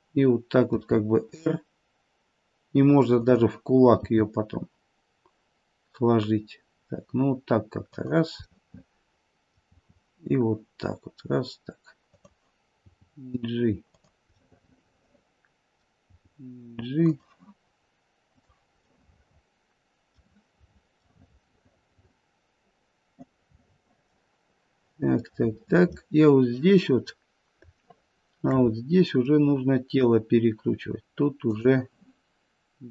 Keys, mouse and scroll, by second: 0.7 r, 3.9 g, 8.5 middle click, 9.7 r, 12.8 g, 14.3 middle click, 14.7 middle click, 16.0 g, 18.3 click, 19.0 middle click, 19.4 middle click, 21.0 middle click, 25.3 middle click, 26.9-27.8 scroll up 1, 27.8 shift+middle click, 27.8-28.1 scroll up 5, 28.8-29.3 scroll down 1, 29.3 middle click, 29.8 middle click, 31.5 click.